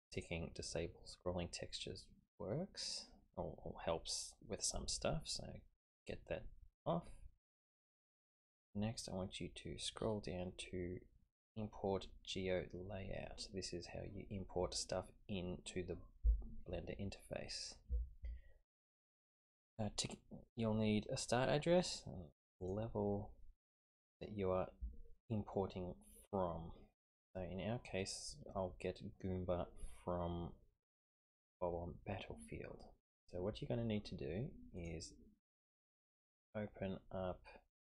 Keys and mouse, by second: 0.1 click, 21.2-22.7 drag.